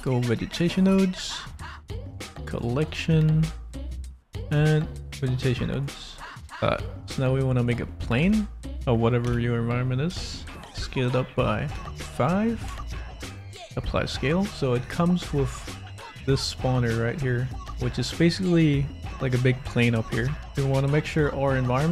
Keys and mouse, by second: 6.4 x, 6.6 shift+a, 8.2 s, 9.2 5, 10.0 Return, 10.7 click, 11.7 ctrl+a, 13.0 click, 15.9 click, 17.7 Tab, 18.6 s, 20.4 click, 21.6 click.